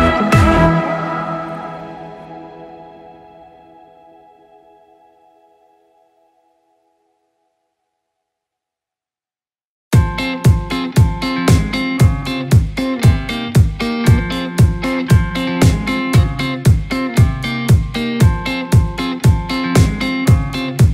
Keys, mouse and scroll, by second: 5.8-8.1 drag, 10.2-11.7 drag, 11.7-12.3 scroll up 2, 12.3-13.6 drag, 13.6 scroll down 3, 13.8-16.6 middle drag, 19.1 click.